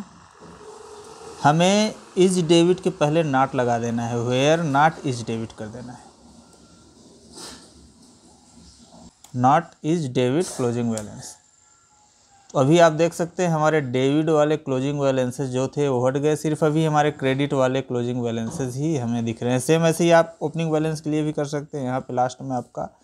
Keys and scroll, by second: 6.1 Right, 15.5 Down.